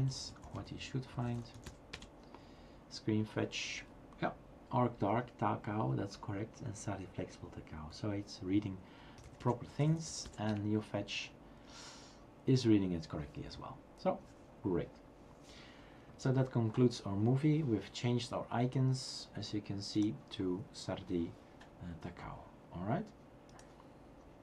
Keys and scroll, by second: 0.0-2.1 typing, 9.0-10.7 typing.